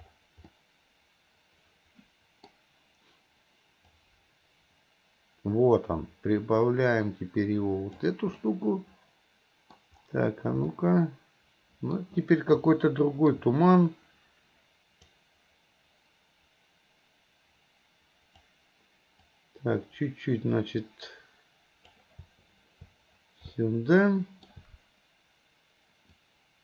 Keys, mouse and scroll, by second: 18.4 click.